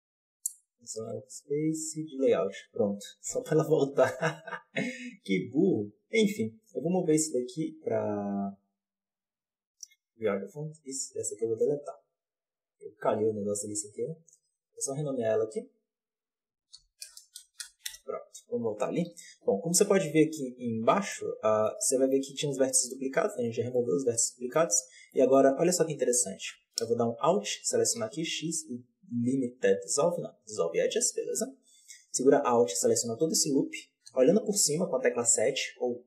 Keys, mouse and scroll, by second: 3.9 click, 5.4-9.8 drag, 9.8 right click, 10.8 click, 12.2 right click, 12.7-19.0 drag, 19.0 KP_Decimal, 20.8-21.1 middle drag, 21.1 right click, 21.5-22.1 middle drag, 22.1 Tab, 23.6-26.3 middle drag, 26.3 alt+a, 27.0 alt+right click, 30.5 x, 32.4 alt+right click, 34.0 KP_7.